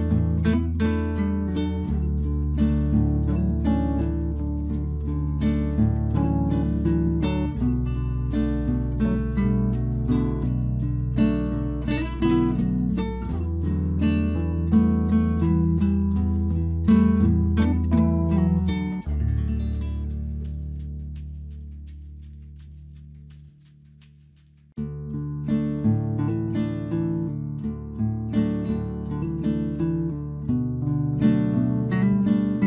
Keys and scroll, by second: 22.7 Return.